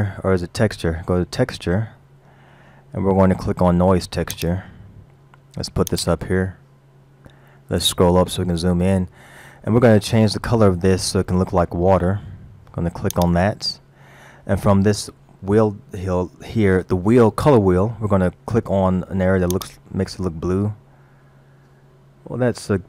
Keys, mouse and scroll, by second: 7.1-7.9 scroll up 4, 7.9 middle click, 7.9-8.3 scroll up 2, 13.2 click.